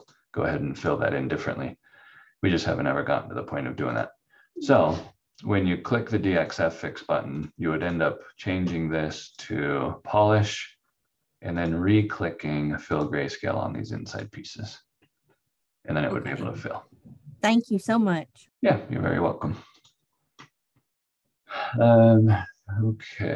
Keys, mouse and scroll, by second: 0.0 click, 3.9 click, 19.7 click.